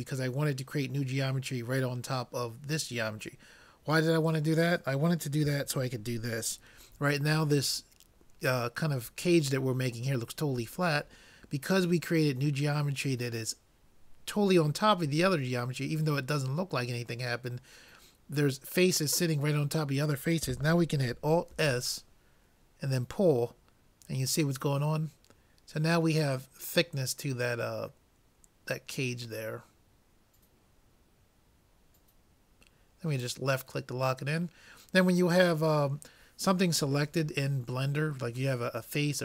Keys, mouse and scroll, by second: 21.5 alt+s.